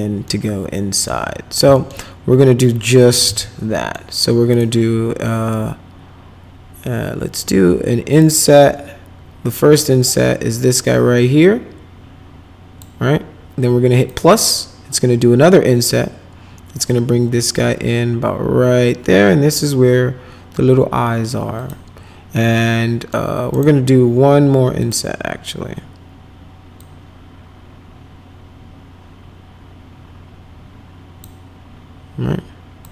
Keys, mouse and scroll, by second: 0.3 alt+middle click, 1.7 alt+middle click, 2.8-3.8 typing, 3.7 middle click, 4.5 right click, 8.1 click, 10.7-12.8 drag, 14.0 click, 16.9-19.5 drag, 21.6 click, 22.5 middle click, 23.5 right click, 24.8 click, 26.8-31.2 drag.